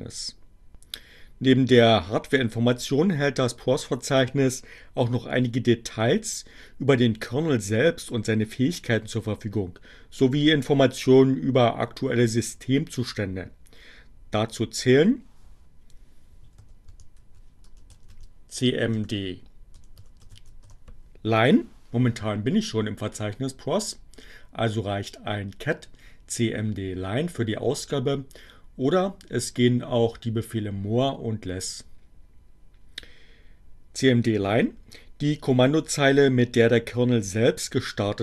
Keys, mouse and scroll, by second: 16.4-20.1 typing, 20.5 Return.